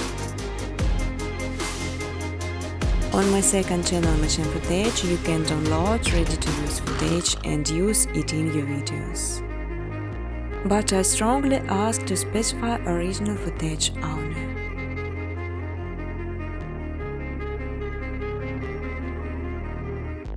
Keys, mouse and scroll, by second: 1.1-1.9 typing, 2.3 click, 3.1 click, 3.3 click, 6.0 click, 6.7-7.8 typing, 8.3 Tab, 9.4-10.4 typing, 11.7-14.2 typing, 15.5-16.3 typing, 17.4-18.1 typing, 18.8 click, 19.4 typing, 19.6 ctrl+c, 20.0 ctrl+d.